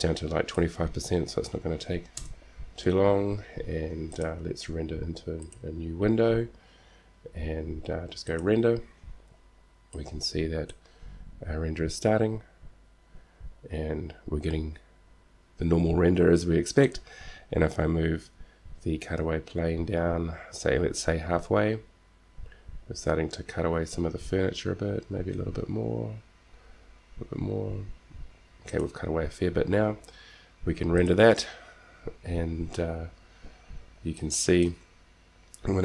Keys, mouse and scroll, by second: 4.3-6.3 drag, 8.5-10.5 drag, 17.0-19.0 drag, 18.3 g, 31.5-33.2 drag.